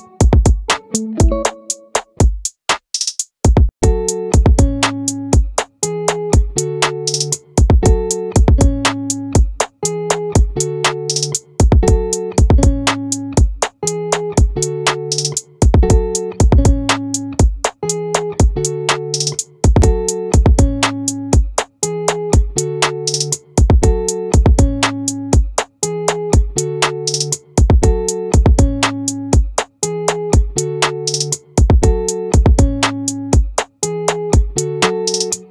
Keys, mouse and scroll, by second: 2.5 z, 4.4 Tab, 11.6 middle click, 20.0 middle click, 24.2 shift+a, 30.6 r.